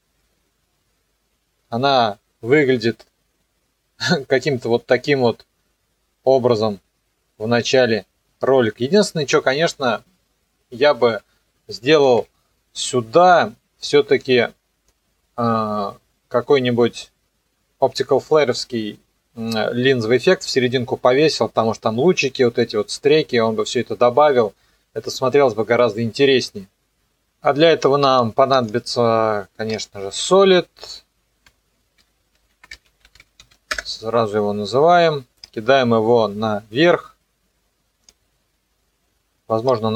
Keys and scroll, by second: 6.3 KP_0, 10.9 KP_0, 12.1 ctrl+s, 31.8-33.9 typing.